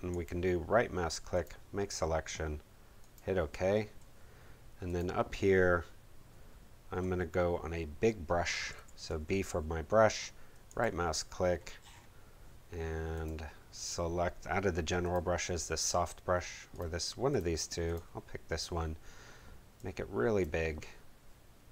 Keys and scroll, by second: 8.7 b.